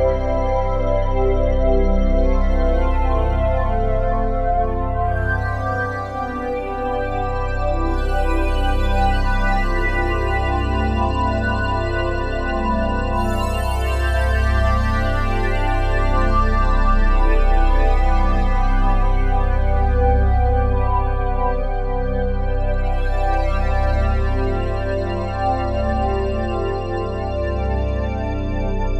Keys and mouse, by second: 0.3 alt+click, 1.3 click, 2.4 ctrl+alt+click, 2.5-3.4 typing, 3.6-5.3 ctrl+alt+drag, 5.6 alt+shift+click, 6.1 ctrl+alt+click, 7.3 click, 8.7 s, 9.8 Escape, 11.0-13.6 drag, 13.6 s, 15.3-18.8 drag, 16.2 typing, 18.4-18.9 typing, 19.5-21.1 drag, 21.3-22.3 ctrl+alt+drag, 22.3 typing, 23.5 click, 24.6-28.5 alt+drag, 28.5 typing.